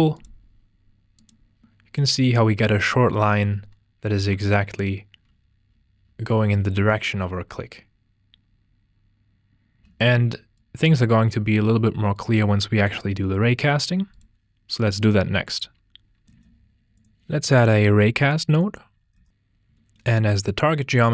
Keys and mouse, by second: 4.7 alt+click, 9.8 g, 10.5 ctrl+j, 11.5 F2, 16.3 shift+a.